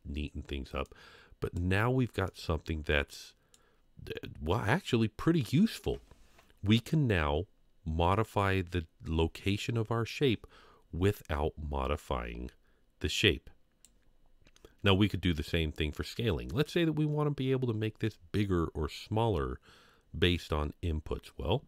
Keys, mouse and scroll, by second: 0.8 click, 2.2-3.5 drag, 4.1 scroll down 1, 4.5-5.8 middle drag, 13.1 click, 13.3 click.